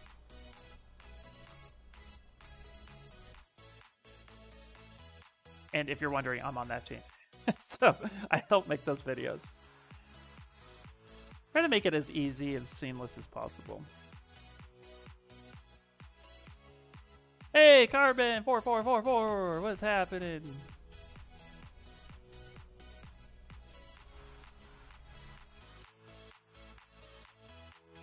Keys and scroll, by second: 14.6 s.